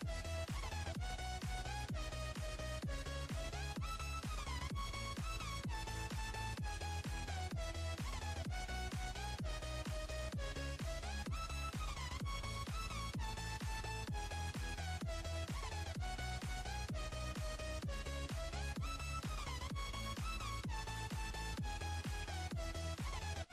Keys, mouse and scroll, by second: 5.5 Tab, 6.8 ctrl+z, 8.3 ctrl+b, 10.5 Tab, 11.0-11.5 scroll down 2, 11.5 click, 12.4 click, 13.6-15.1 scroll down 6, 15.1 click, 18.6 scroll up 6, 19.4 click, 20.3 click, 21.2 click, 22.5 click, 23.2-23.5 drag.